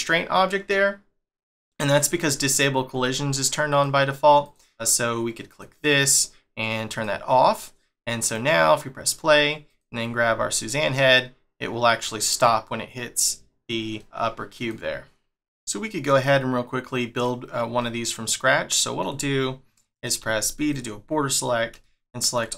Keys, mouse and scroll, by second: 1.8 scroll up 1, 2.3 scroll up 1, 2.3 shift+middle click, 3.7 click, 4.4 click, 5.5 click, 6.9 click, 8.2 click, 9.7 click, 10.2 g, 16.1 middle click, 20.2 b, 21.8 shift+middle click.